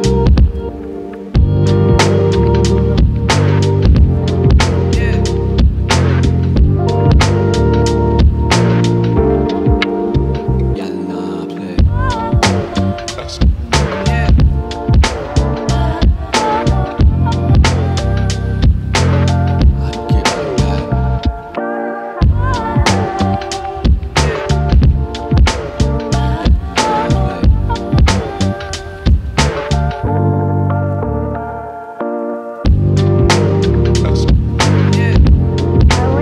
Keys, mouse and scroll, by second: 0.1-0.7 scroll up 1, 0.7 scroll down 2, 0.9 shift+middle click, 1.3-1.8 scroll up 1, 1.8 g, 4.9 e, 7.7 e, 10.4 click, 11.3 e, 12.4 e, 15.8 e, 17.3 e, 18.8 e, 21.5 e, 23.5-25.8 shift+middle drag, 25.8 e, 29.4 e, 31.1 click, 31.6 g, 32.7 click, 33.3 e, 35.4 e.